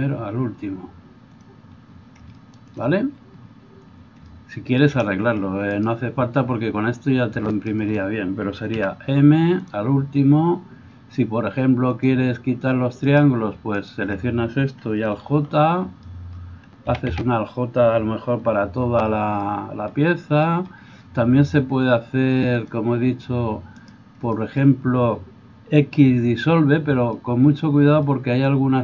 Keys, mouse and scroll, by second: 5.7 right click, 5.9-11.9 middle drag, 8.7 m, 11.9-28.8 drag, 13.1 middle click, 13.1 right click, 13.8 shift+middle click, 13.8 shift+right click, 15.3 alt+j, 16.9 a, 17.1 a, 18.6 alt+j, 23.7 right click.